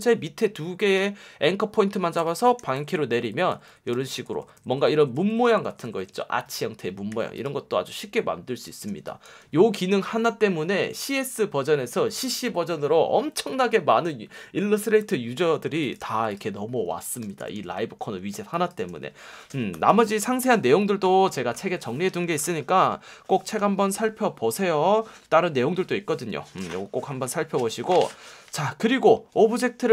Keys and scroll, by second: 2.8 shift+Up, 3.0 shift+Down, 3.5 shift+Up, 3.9 Down, 7.1 v, 8.9 space, 15.6 space, 16.0 v, 17.2 super+-, 18.0 space.